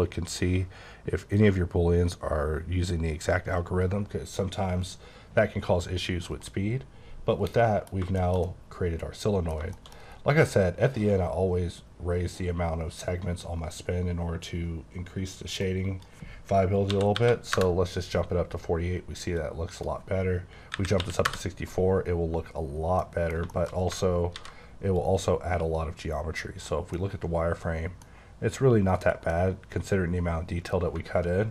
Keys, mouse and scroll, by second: 6.3 middle click, 7.9 scroll down 1, 8.2 middle click, 8.5 double middle click, 9.7-10.1 shift+scroll up 5, 9.9 shift+middle click, 15.6 click, 16.9 KP_4, 17.1 KP_8, 17.5 KP_Enter, 19.6 click, 20.7 KP_6, 21.0 KP_4, 21.2 KP_Enter, 22.6 scroll down 2, 23.0 middle click, 24.3 v, 25.0 click, 26.9 middle click, 29.0 middle click, 29.2-30.9 scroll down 1, 30.9 alt+scroll down 1.